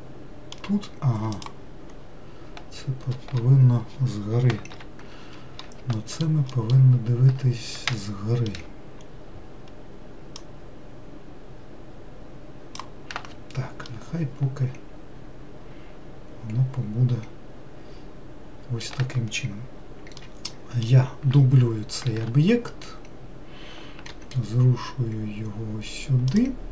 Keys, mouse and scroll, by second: 1.6 click, 2.3-5.0 scroll up 2, 5.0 ctrl+l, 6.2 alt+middle click, 6.8 alt+middle click, 8.2-9.3 shift+middle drag, 9.3-10.7 scroll up 3, 10.7 click, 14.1-17.2 middle drag, 20.5-22.3 middle drag, 22.3 shift+d.